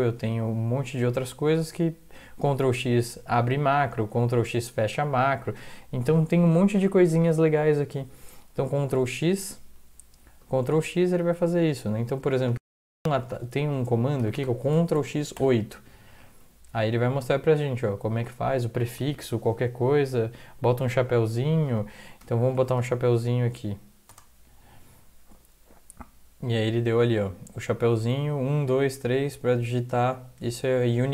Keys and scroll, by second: 8.9 ctrl+x, 14.2 Return, 14.4 Return, 15.0 ctrl+x, 24.1 ^.